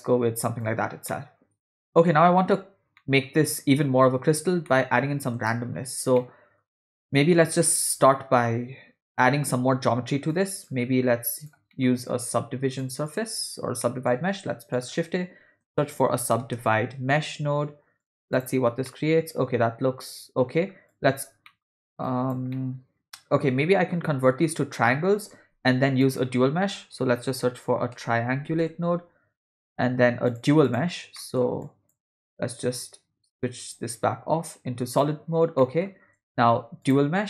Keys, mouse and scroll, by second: 1.1-2.1 middle drag, 3.0-4.1 middle drag, 4.7 ctrl+middle click, 5.5 shift+middle click, 6.2 middle click, 7.0 middle click, 10.3-10.7 drag, 11.3 click, 11.7 middle click, 12.7 click, 13.1 click, 13.8 middle click, 14.0 scroll up 1, 14.1 shift+a, 18.9-20.4 middle drag, 20.9 click, 21.5 middle click, 22.1 click, 22.6-24.1 middle drag, 25.4 shift+a, 31.2 middle click, 31.6 click, 33.7 click, 35.0 click, 35.6 middle click, 36.2 shift+a.